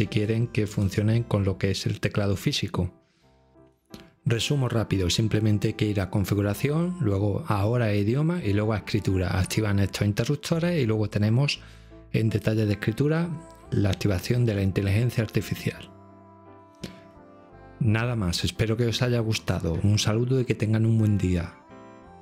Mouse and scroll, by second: 12.3-13.4 right drag.